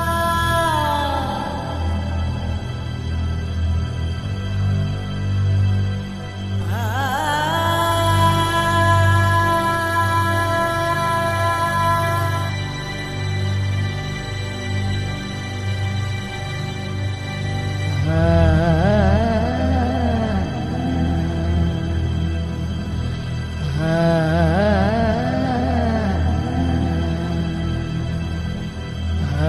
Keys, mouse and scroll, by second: 0.7 click, 1.8-3.1 drag, 5.4 shift+z, 6.9 shift+z, 7.4 KP_1, 7.6 middle click, 8.2 shift+a, 9.3 middle click, 9.6 click, 10.1 r, 10.9 s, 11.8 click, 12.4 click, 12.8 KP_3, 13.2 click, 15.3 KP_0, 15.6 shift+z, 17.6 click, 18.4 KP_0, 20.3 shift+z, 20.6 click, 21.9 shift+z, 25.4 shift+z, 25.8 middle click, 26.0 click, 26.7 middle click, 27.4 click, 27.8 KP_0, 28.2 middle click, 28.8 middle click.